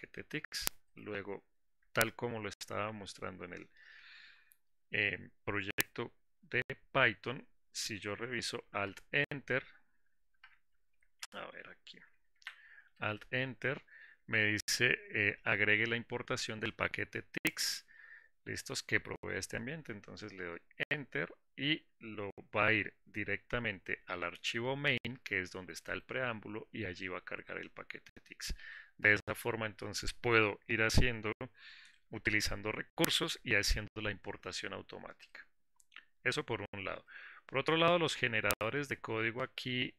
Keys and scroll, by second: 14.0 alt+Return.